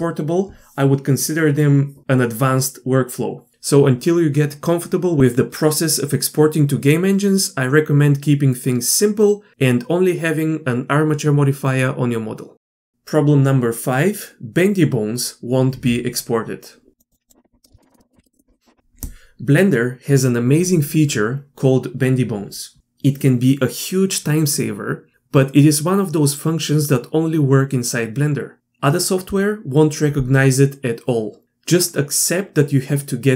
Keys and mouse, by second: 17.3 click, 17.6 middle click.